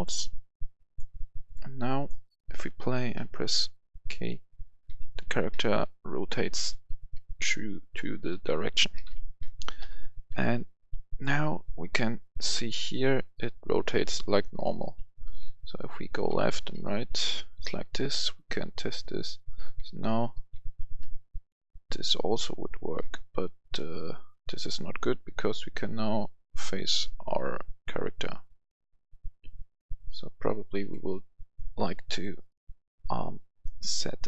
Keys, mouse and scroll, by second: 3.1 k, 4.2-9.8 typing, 10.2 Escape, 11.1 click, 14.0-24.0 typing, 30.7 Escape, 31.5 click, 34.1 shift+click.